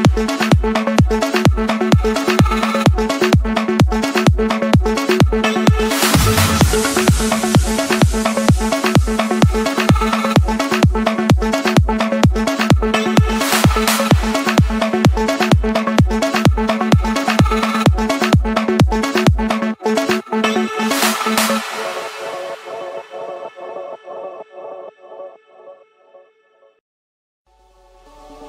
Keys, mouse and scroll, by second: 0.1 click, 1.1 Escape, 1.2 Escape, 1.8-2.9 typing, 3.8 Return, 4.3-5.0 typing, 5.2 Escape, 7.3 click, 8.7 click, 9.0-9.7 scroll, 9.9 Escape, 10.9-12.9 typing, 11.7 Return, 16.4-17.6 drag, 17.8-18.9 drag, 21.3-22.0 typing, 22.2 Return, 22.9 Escape, 24.6-27.0 typing, 28.1-28.4 drag.